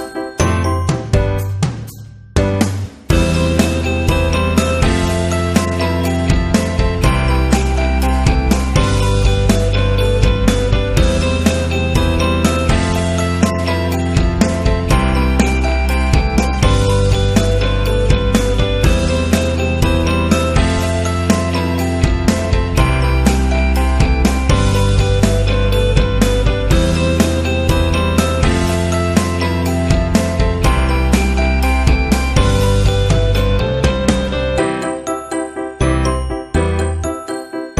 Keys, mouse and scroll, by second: 0.6 click, 4.7 click, 4.9-5.7 typing, 5.2 click, 6.9 click, 13.1 click, 14.3 click, 14.8 click, 17.1 click, 19.6 click, 21.1-21.9 typing, 21.1 click, 24.7 click, 30.2 typing, 31.4-32.3 typing, 33.0 Return, 34.8-36.0 typing, 37.0 Return, 37.6-37.7 typing.